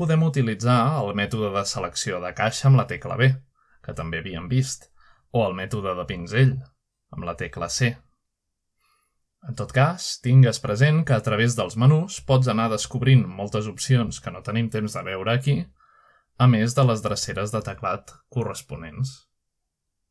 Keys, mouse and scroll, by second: 0.0-2.4 typing, 0.1 middle click, 0.3 middle click, 0.7 middle click, 1.4 middle click, 1.5-2.5 scroll down 1, 3.3 middle click, 4.2 typing, 4.6-6.5 drag, 6.8-7.5 typing, 8.0-11.1 drag, 12.6 middle click, 13.0-16.2 drag, 16.2 right click, 17.5 click.